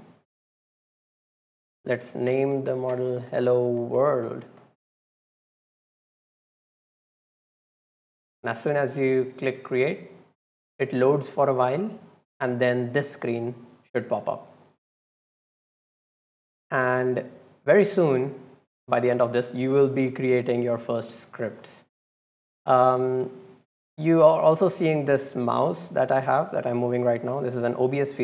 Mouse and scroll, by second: 0.4 click, 1.7 click, 6.0 click, 25.2-28.2 drag.